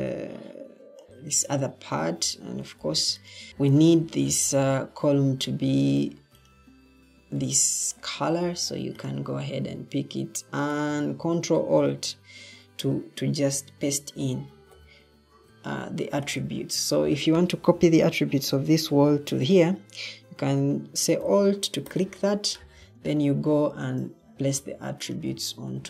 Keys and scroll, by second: 1.9 Escape, 3.5 Escape, 3.5 o, 5.3 Escape.